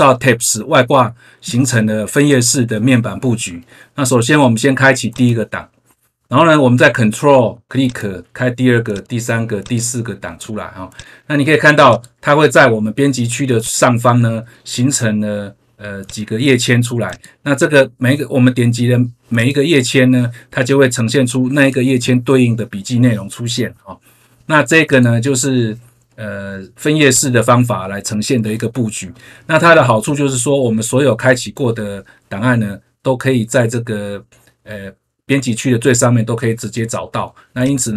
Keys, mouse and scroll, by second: 5.1 click, 7.7 ctrl+click, 8.8 ctrl+click, 9.6 ctrl+click, 10.9 click, 11.8 click, 13.5 click, 16.0 click, 17.0 click, 19.3 click, 23.1 scroll down 1, 24.9 click, 27.1 click, 37.5 click.